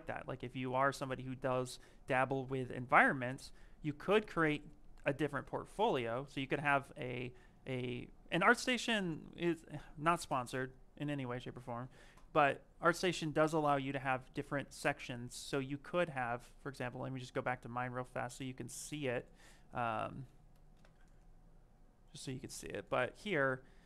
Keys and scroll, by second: 1.4-3.1 typing, 19.7-20.6 typing.